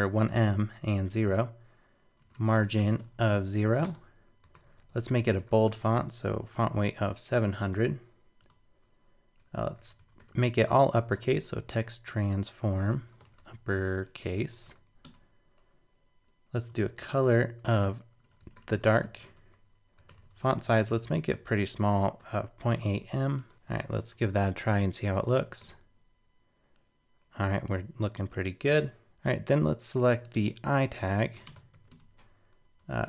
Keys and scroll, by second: 23.5 super+BackSpace, 23.7 super+s, 24.1 super+Tab, 25.6 super+r, 28.7 super+Tab.